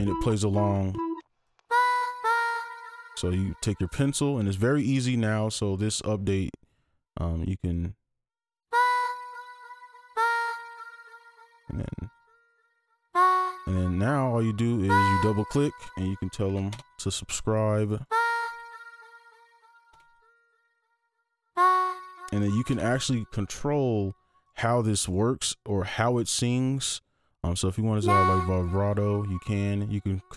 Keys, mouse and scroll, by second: 0.0-1.2 typing, 14.7 double click, 15.9-17.0 typing, 17.9 double click, 18.7-20.3 typing, 21.4 double click, 22.1-23.0 typing.